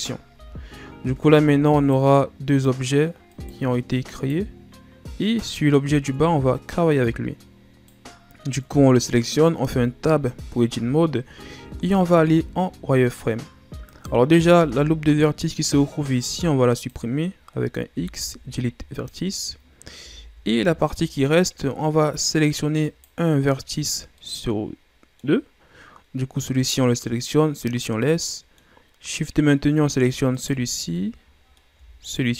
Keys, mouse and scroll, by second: 0.3 z, 1.2 Tab, 1.7 right drag, 2.5 right click, 3.3 right click, 4.1 right click, 5.2 right click, 6.1 Tab, 7.8 right click, 9.6 Tab, 11.6 z, 12.4-13.8 shift+scroll down 1, 13.8 right click, 14.5 b, 17.9 x, 20.0 z, 20.7-21.3 shift+scroll down 3, 21.3-22.8 scroll up 2, 22.8 right click, 23.7-24.1 scroll down 2, 24.1-25.7 middle drag, 25.7-28.1 scroll up 1, 28.1-30.3 middle drag, 30.3 shift+right click, 31.0-32.1 middle drag, 32.1 shift+right click.